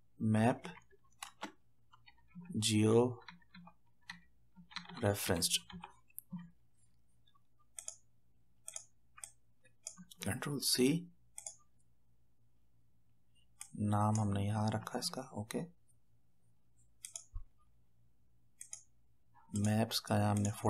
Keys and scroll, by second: 0.0-6.2 typing, 10.6 ctrl+c, 14.7 ctrl+v.